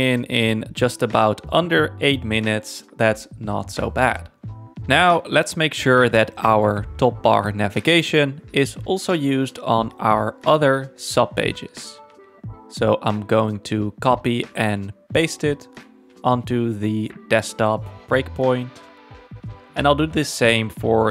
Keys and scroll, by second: 9.8 super+c, 15.9 super+v.